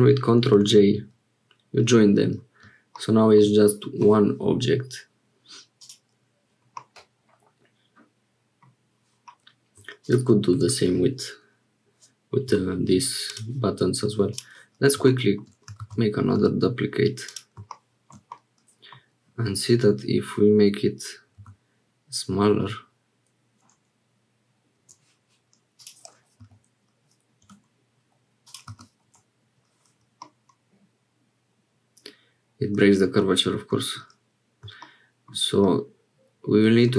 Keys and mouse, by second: 0.9 ctrl+j, 6.7-8.7 drag, 15.8 shift+d, 18.3 middle click, 21.4 s, 25.7-28.0 drag, 28.4-29.6 drag, 30.2-32.9 middle drag, 33.2 middle click, 35.6-36.9 middle drag.